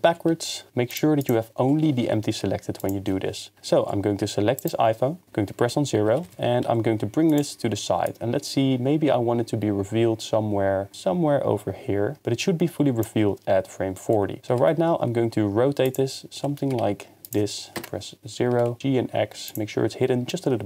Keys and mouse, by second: 0.1 g, 0.3 x, 0.7 ctrl+z, 0.9 drag, 1.2 click, 1.8 g, 2.0 y, 2.8 click, 3.6 x, 4.1 g, 4.6 click, 5.2 KP_0, 6.1 g, 6.3 y, 6.6 x, 14.1-14.5 middle drag, 14.5 r, 14.7 z, 15.9-16.6 drag, 16.6-18.8 typing, 17.2-17.6 drag.